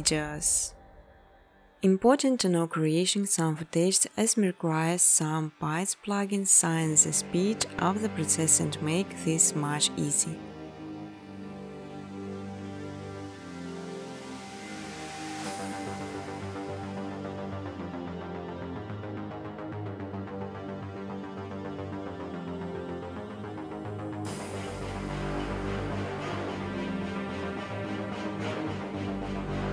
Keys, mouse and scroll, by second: 0.0-3.3 typing, 2.5 click, 4.4 click, 6.9 click, 7.1-9.0 typing, 10.1 Tab, 11.4 Tab, 12.2-13.0 typing, 13.9 Return, 15.7 click, 16.3-18.4 typing, 19.5 Tab, 20.3 Tab, 20.3-24.6 typing, 21.5 Tab, 21.8 Tab, 26.1 alt+click, 26.3-28.1 typing, 28.7 click, 29.6 scroll down 2.